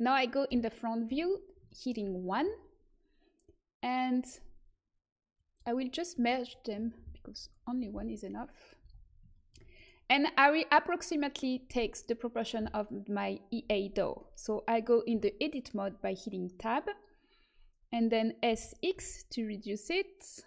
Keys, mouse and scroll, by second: 0.6 KP_1, 5.3-8.1 drag, 7.7 ctrl+j, 8.7 z, 15.1 Tab, 18.6 s.